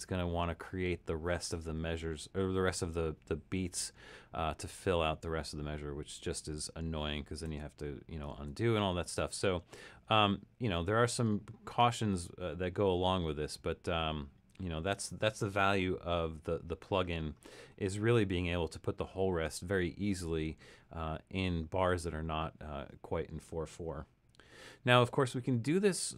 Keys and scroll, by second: 7.4 super+z, 8.4 super+z, 25.1 super+-, 25.7 super+-.